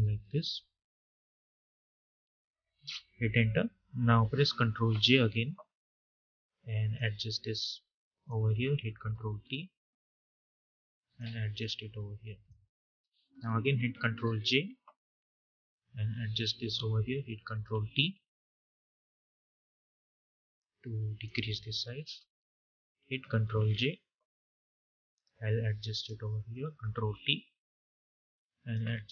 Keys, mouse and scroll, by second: 1.3 Return, 4.7 ctrl+j, 5.8-9.1 drag, 9.1 ctrl+t, 10.0-12.7 drag, 12.7 Return, 15.0-17.3 drag, 17.3 ctrl+t, 18.7-21.8 drag, 21.8 Return, 24.3-26.8 drag, 26.8 ctrl+t, 27.9-29.1 drag.